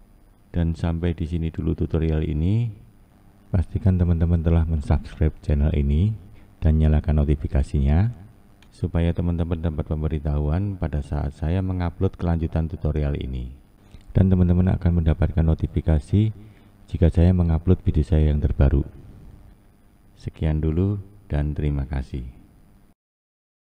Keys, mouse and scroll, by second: 1.7-9.1 drag, 10.2 scroll up 2, 10.4-11.1 scroll down 2, 11.1-15.1 scroll up 1, 15.1-21.6 shift+middle drag, 16.8-17.4 scroll up 3, 17.4-21.6 scroll down 1, 21.9-22.4 scroll up 1, 22.4-22.8 scroll down 1.